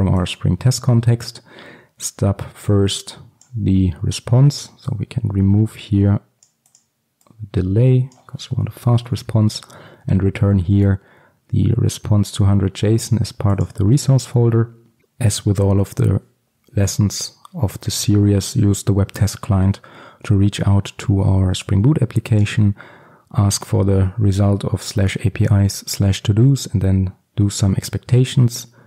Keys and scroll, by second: 9.1 ctrl+alt+super+l.